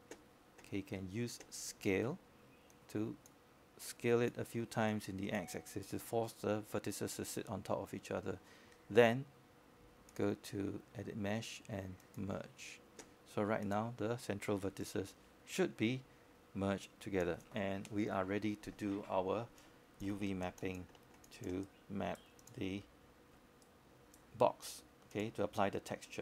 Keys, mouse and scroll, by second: 0.5 click, 1.4-2.1 scroll up 1, 2.1-4.1 right drag, 4.1 space, 4.1-6.2 drag, 6.2-6.6 scroll down 1, 6.6-7.4 scroll up 1, 7.6 alt+middle click, 8.1-8.4 scroll up 1, 8.6 alt+middle click, 9.6-11.4 drag, 14.6 e, 15.8-19.4 drag.